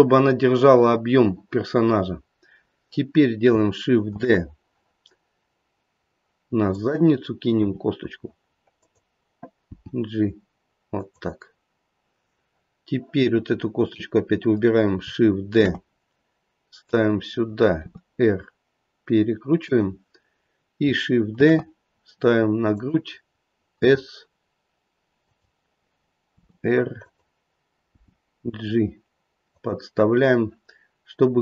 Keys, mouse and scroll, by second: 4.1 shift+d, 7.5 r, 9.7 g, 13.8 click, 15.5 shift+d, 17.8 r, 21.3 shift+d, 23.8 s, 26.3 r, 27.9 g.